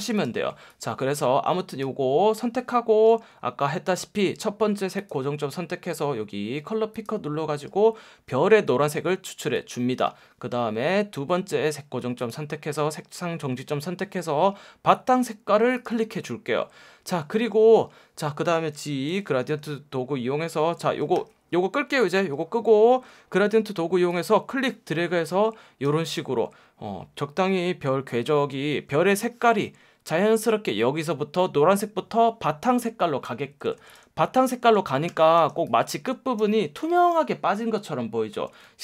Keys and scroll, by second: 3.1 F1, 8.1 F1, 19.6 g, 21.2 F1, 22.9 F1, 30.4 F1, 33.5 v, 34.4 space, 35.1 F1, 35.4 space, 35.9 super+space.